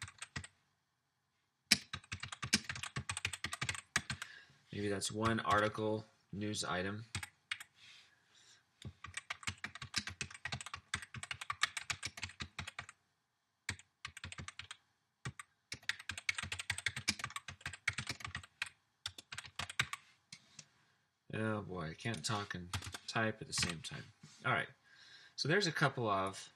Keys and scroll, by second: 0.0-4.5 typing, 5.1 Return, 5.5 Return, 5.6 typing, 6.8 typing, 7.2 Up, 7.6 Up, 8.9-20.3 typing, 22.8-24.0 typing.